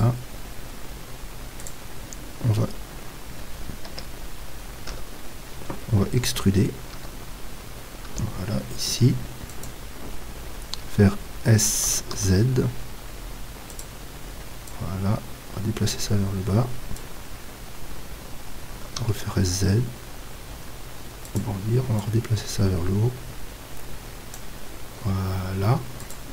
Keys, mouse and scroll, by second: 3.9 KP_3, 4.9 KP_1, 6.9 z, 8.1 e, 9.7-11.5 drag, 11.9 s, 13.8-18.8 drag, 18.8 s, 21.4-26.3 drag.